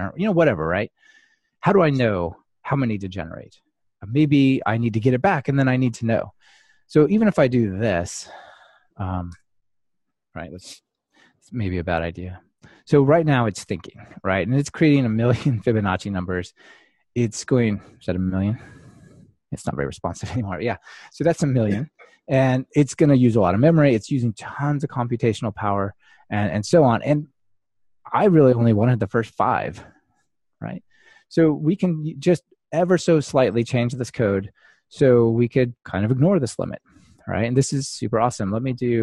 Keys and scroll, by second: 11.8 ctrl+r, 32.9 super+F2.